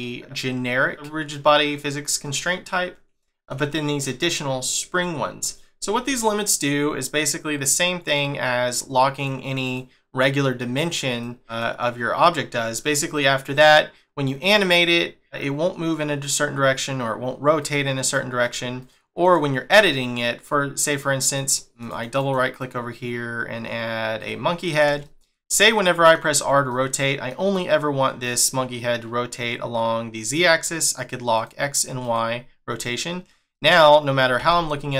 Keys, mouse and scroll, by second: 3.2 shift+middle click, 5.5 shift+middle click, 7.5 click, 8.1 click, 9.1 click, 9.6 click, 11.1 click, 13.6 click, 17.6 click, 18.0 click, 18.4 click, 18.8 click, 19.2 click, 21.3 click, 21.8 right click, 21.9 right click, 22.2 right click, 25.0 shift+middle click, 26.7 middle click, 31.3 click, 32.0 click, 33.5 middle click, 34.4 r.